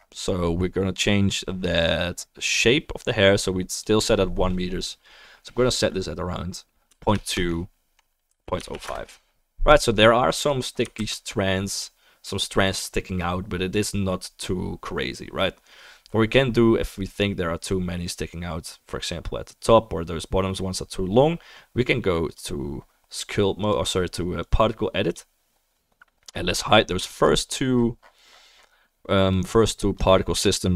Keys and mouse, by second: 1.3-30.7 right drag, 3.8-10.5 drag, 3.8-10.5 middle drag, 11.1 ctrl+s, 23.6 click, 24.5-30.7 drag, 25.4-30.7 middle drag.